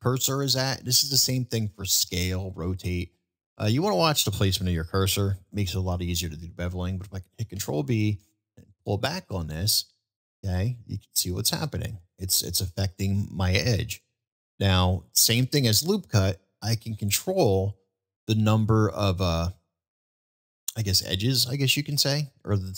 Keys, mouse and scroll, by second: 7.5 ctrl+b.